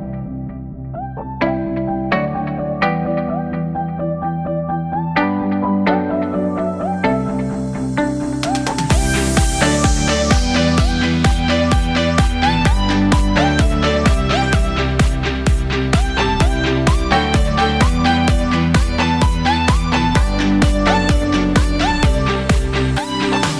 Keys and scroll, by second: 3.6 ctrl+z, 7.3 ctrl+z, 9.1 ctrl+z, 10.2 ctrl+z, 16.8 ctrl+z.